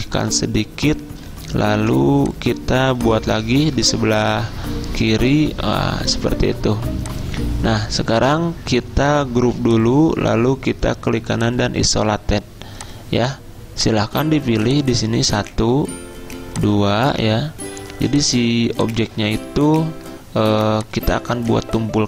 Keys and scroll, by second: 1.8 v.